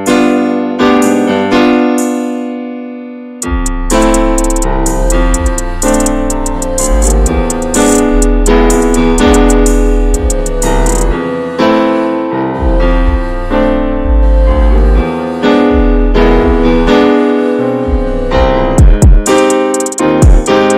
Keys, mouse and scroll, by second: 1.1-1.4 scroll up 1, 1.4 middle click, 2.0 scroll down 1, 2.2 alt+z, 2.9 alt+z, 4.6-6.6 middle drag, 6.6 alt+z, 7.0 shift+middle click, 7.2 scroll up 1, 7.3 alt+z, 7.6 middle click, 7.9 scroll up 1, 8.6 click, 9.2 middle click, 10.2-10.6 scroll up 1, 10.6 middle click, 11.2 scroll up 1, 11.4-13.0 middle drag, 13.0 click, 13.5 alt+shift+click, 13.7 alt+shift+click, 13.8-14.1 scroll down 4, 14.1 shift+middle click, 14.9 scroll up 1, 15.1-16.5 shift+middle drag, 16.5 right click, 16.8 a, 17.1 a, 17.2-18.1 right drag, 18.1 middle click, 18.5-18.9 scroll down 1, 18.9-19.9 shift+middle drag, 19.9 click, 20.2 Tab, 20.5 drag, 20.7 scroll down 2.